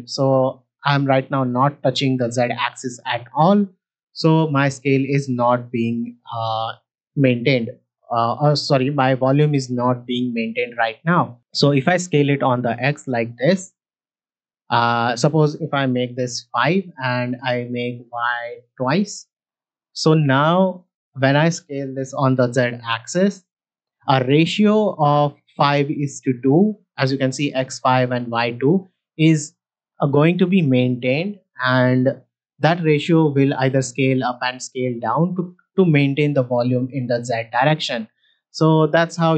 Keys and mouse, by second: 7.8 middle click, 11.5-15.1 drag, 15.2-16.4 drag, 17.3-18.7 drag, 20.5 middle click, 22.3 s, 22.4 z, 28.5 shift+middle drag, 28.9-29.3 ctrl+middle drag, 29.5 shift+middle click, 31.5 s, 31.7 z.